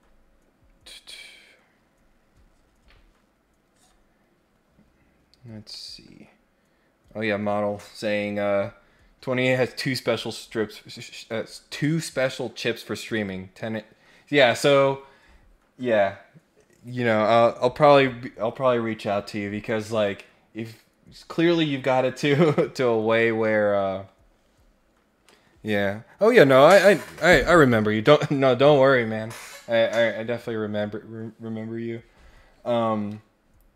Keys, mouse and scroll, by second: 5.5 scroll down 2, 5.7-6.0 scroll up 2.